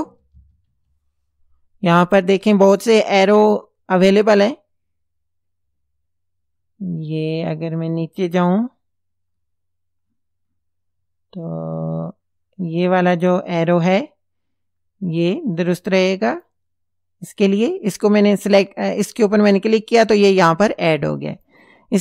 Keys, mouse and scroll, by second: 0.0-0.9 typing, 5.6 scroll down 2, 6.2-8.7 scroll down 10, 9.3-9.8 scroll up 2, 10.0 scroll down 2, 10.8-11.2 scroll down 2, 12.3 scroll down 2, 14.8 scroll down 2, 16.3 click, 21.3 click.